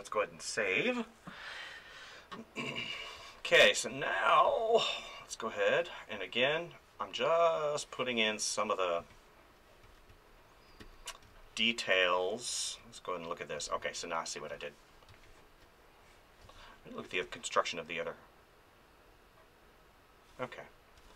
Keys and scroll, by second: 3.2 space, 9.0 space, 9.8 ctrl+z, 11.2 space, 13.5 space, 15.1 space.